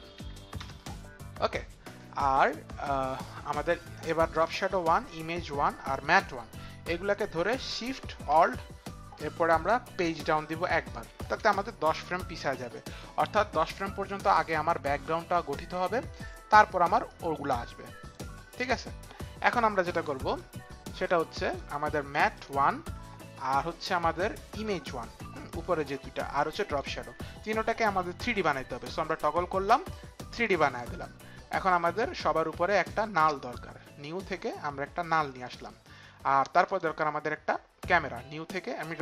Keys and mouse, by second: 0.1 KP_1, 0.6 Return, 5.0 shift+click, 5.9 shift+click, 10.6 alt+shift+Page_Down, 13.0 click, 17.1 click, 20.9 click, 22.5 click, 24.6 click, 25.4 ctrl+click, 26.6 ctrl+click.